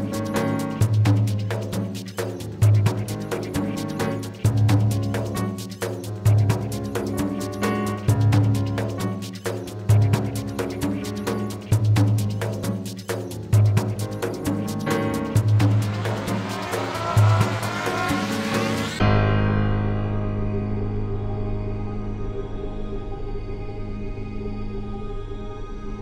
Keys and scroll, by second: 11.9 ctrl+z, 13.2 Return.